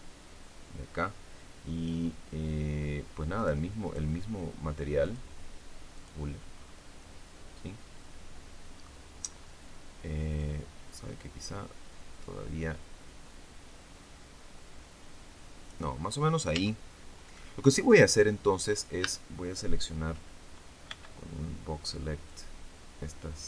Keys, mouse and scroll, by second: 3.2 right click, 3.8 right click, 4.9 click, 5.8 click, 6.4-6.8 scroll down 2, 6.9-8.9 middle drag, 9.2-9.5 scroll up 2, 10.3-15.8 drag, 15.8-16.2 scroll up 2, 16.4 Tab, 18.9 a, 20.8 b, 22.2-23.4 drag.